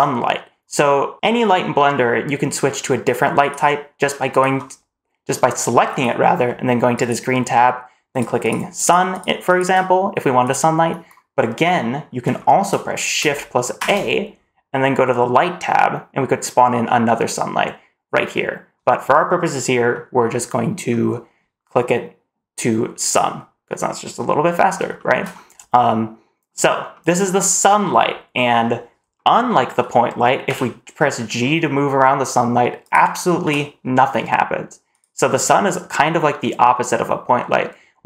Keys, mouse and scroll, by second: 3.3 click, 4.1 click, 5.7 click, 6.8 click, 8.0 click, 8.3 click, 8.7 click, 9.0 click, 9.3 click, 10.3 click, 11.2-11.5 middle drag, 12.2 shift+middle click, 13.6 shift+a, 19.8 middle click, 20.7-22.9 scroll down 1, 22.9 click, 24.8 shift+middle drag, 25.2-25.7 scroll down 1, 25.7-26.3 middle drag, 26.8-27.1 middle drag, 28.3-28.9 scroll down 1, 29.0-29.4 middle drag, 30.3 g, 33.3 g.